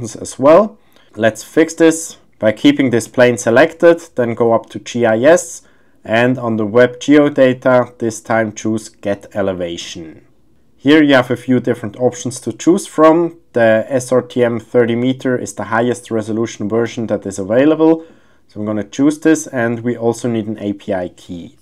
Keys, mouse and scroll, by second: 3.0 click, 6.4-21.6 drag.